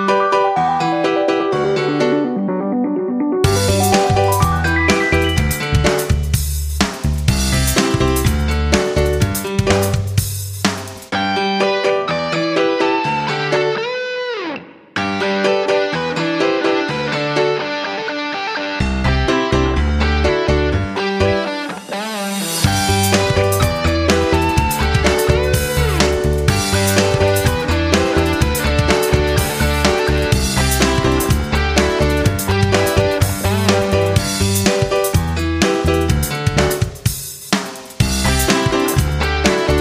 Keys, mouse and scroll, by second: 2.2 ctrl+scroll up 1, 2.9-4.6 drag, 5.3 ctrl+scroll, 6.8 click, 9.8-10.7 ctrl+scroll, 10.7 click, 11.0 ctrl+scroll up 1, 12.6 click, 17.6 click, 32.2 F9, 33.1 click, 35.5 ctrl+scroll, 36.0 ctrl+click.